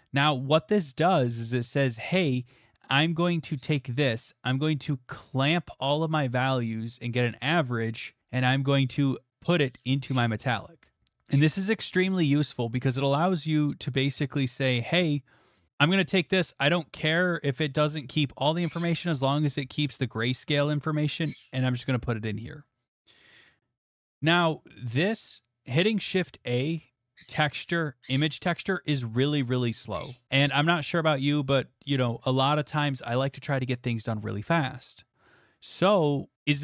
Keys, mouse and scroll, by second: 2.9 scroll, 13.4 click, 14.3 click, 16.4 click, 23.4 middle click, 24.0 middle click, 24.1 middle click, 24.6 middle click, 25.0 middle click.